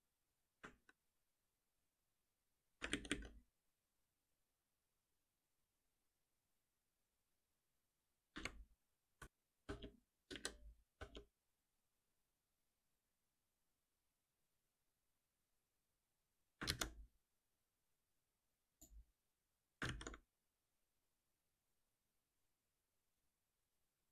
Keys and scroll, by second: 1.4 ctrl+shift+Up, 2.9 ctrl+shift+Down, 9.1 ctrl+alt+v, 16.7 ctrl+c, 19.8 ctrl+v.